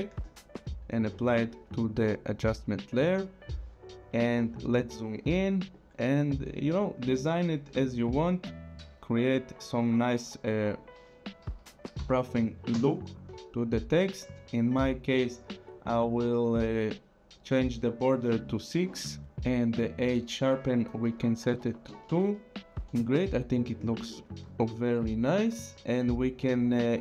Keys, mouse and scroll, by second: 0.9 click, 4.7-5.1 scroll, 5.1 click, 5.3 click, 5.5-6.0 scroll, 5.7 click, 6.0 click, 7.7 click, 10.1 click, 12.0 KP_6, 12.7 Return, 20.4 click, 21.5 scroll down 2, 22.1 Return, 24.7 click.